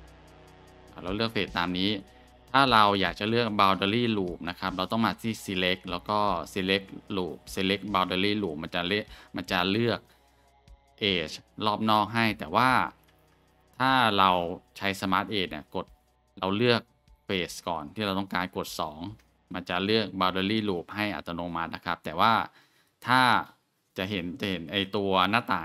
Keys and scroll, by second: 1.5-1.9 scroll, 13.1 ctrl+z, 18.5 2.